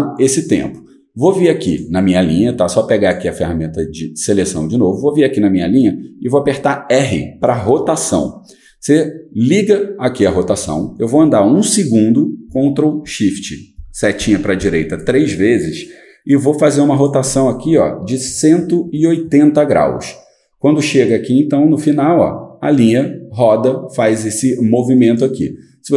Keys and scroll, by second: 6.4 r, 13.8 ctrl+shift+Right, 14.2 ctrl+shift+Right, 18.2-19.3 typing, 20.8-22.5 typing.